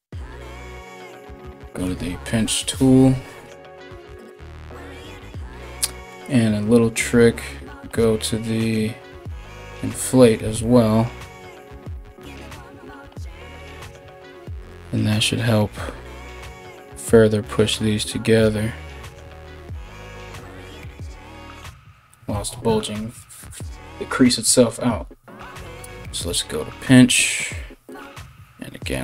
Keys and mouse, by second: 3.5-4.0 ], 7.0 ctrl+=, 11.6 [, 11.6 [, 12.5 ].